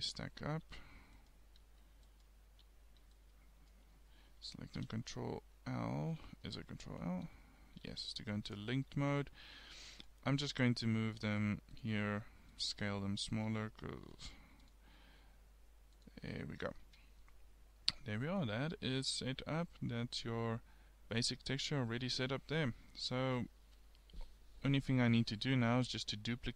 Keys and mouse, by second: 1.2 click, 2.2 click, 2.6 a, 4.8 ctrl+l, 7.2 ctrl+l, 9.5 g, 10.5 s, 11.8 s, 12.8 g, 13.5 s, 15.2 g, 15.3 s, 16.9 Tab.